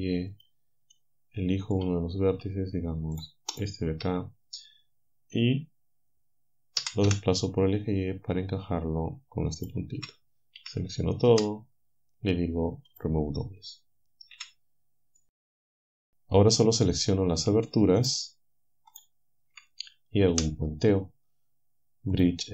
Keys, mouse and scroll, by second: 0.4 y, 0.9-2.9 drag, 3.2 shift+click, 3.6 shift+click, 6.8 g, 9.6 ctrl+click, 10.6-11.3 typing, 12.9 click, 14.4 typing, 15.2 click, 18.0 alt+shift+click, 19.0 alt+shift+click, 20.4 w, 22.2 click.